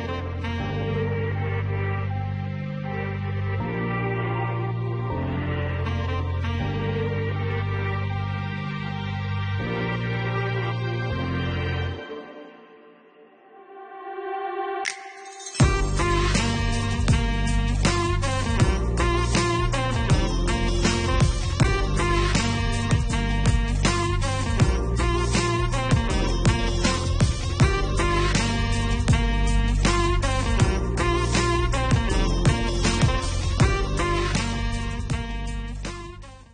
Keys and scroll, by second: 12.5 4, 13.7 -.